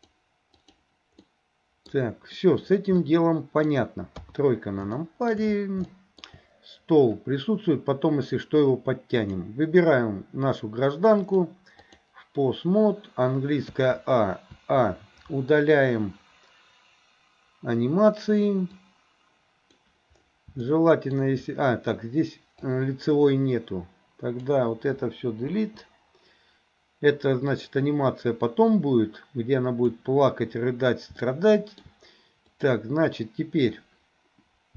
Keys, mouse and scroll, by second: 0.0 click, 1.3 middle click, 3.0 middle click, 4.2 KP_3, 5.0 middle click, 5.9 middle click, 11.2-12.1 drag, 13.8 a, 14.5 a, 18.9 click, 20.7 shift+middle click, 22.7 click, 25.6 Delete, 27.6 click, 28.2 click, 31.3 shift+middle click.